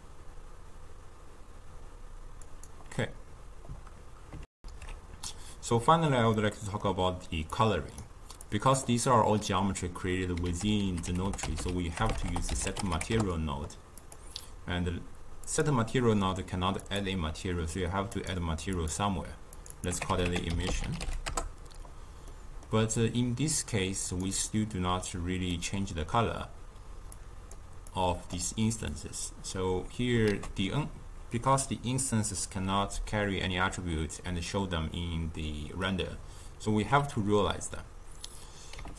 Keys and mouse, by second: 2.5-4.4 drag, 4.4 alt+shift+q, 6.2-7.4 middle drag, 7.4 click, 10.4 ctrl+a, 12.0 BackSpace, 12.2 BackSpace, 15.3 click, 16.7-19.6 drag, 20.6 click, 20.7 s, 22.2-24.1 middle drag, 24.1 click, 25.4-27.1 middle drag, 27.1-27.9 drag, 28.8 click, 30.2 ctrl+a.